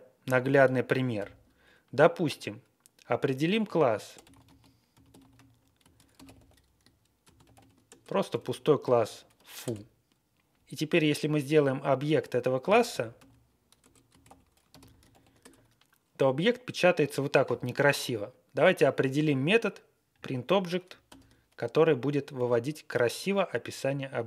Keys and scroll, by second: 1.1 shift+9, 3.6-8.8 typing, 9.6 Return, 12.6-15.5 typing, 13.7 Return, 21.0 shift+9.